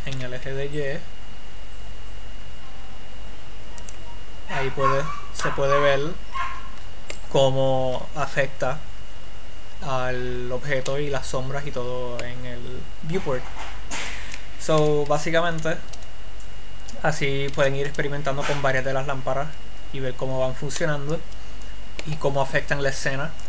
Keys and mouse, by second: 4.9-6.1 drag, 6.1-7.3 middle drag, 7.9 middle click, 11.8 middle click, 12.2 middle click, 15.5 z, 16.3 z, 16.8 click, 17.9 shift+a, 21.9-23.4 drag.